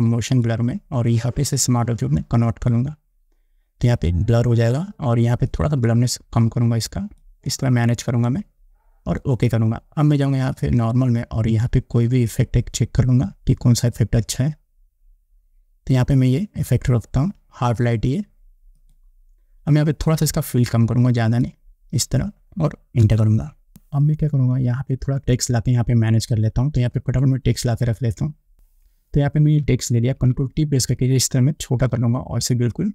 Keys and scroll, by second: 23.3 Return, 30.3 ctrl+t.